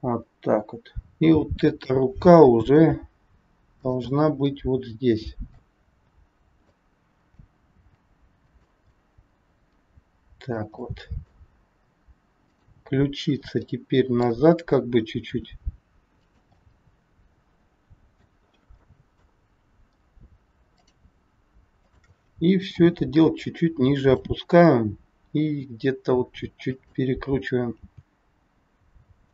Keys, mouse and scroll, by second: 1.0 shift+click, 1.0 middle click, 1.0 scroll down 3, 2.7 g, 4.1 middle click, 7.9 g, 8.7 scroll up 1, 9.0 middle click, 10.9 middle click, 12.4 click, 13.1-13.6 scroll down 2, 13.6 middle click, 15.2 r, 16.6 middle click, 18.5-18.9 scroll up 2, 18.9 middle click, 20.6 click, 21.8 shift+click, 22.8 g, 25.2 r, 27.9 g.